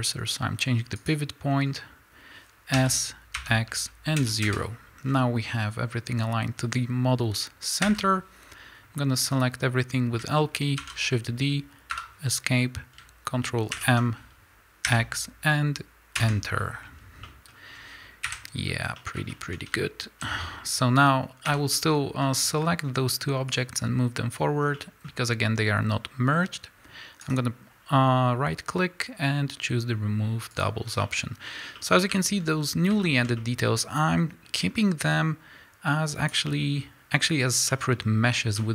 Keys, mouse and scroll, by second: 1.1 ., 1.6 scroll up 1, 2.8 s, 4.5 KP_Enter, 5.1 scroll down 1, 7.8 l, 8.4 scroll down 1, 8.7 scroll up 1, 9.5-10.4 scroll down 1, 10.4 shift+middle click, 10.8 shift+d, 12.0 Escape, 13.8 ctrl+m, 17.3 middle click, 17.7 scroll down 1, 18.2 KP_Decimal, 19.0 middle click, 19.3 shift+middle click, 20.2 z, 20.4-21.5 scroll down 1, 21.5 l, 21.8-22.2 scroll down 2, 22.2-23.5 middle drag, 23.5-24.8 drag, 24.8 middle click, 25.1-28.2 scroll up 2, 28.2-30.6 scroll up 1, 30.6 right click, 30.9 scroll down 2, 31.0-35.1 middle drag, 31.5 scroll up 2, 35.1-36.5 drag, 36.5-38.7 middle drag, 37.4-37.7 scroll down 2.